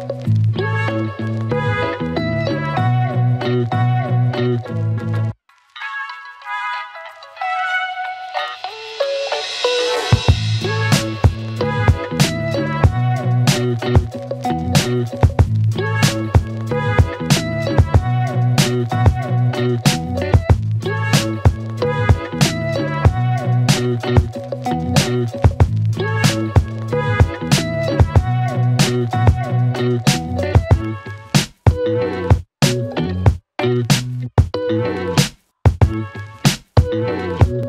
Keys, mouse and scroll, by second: 1.8 right click, 2.9 click, 4.6 click, 17.9 right click, 20.3 click, 22.9 click, 33.1 alt+click, 37.1 click.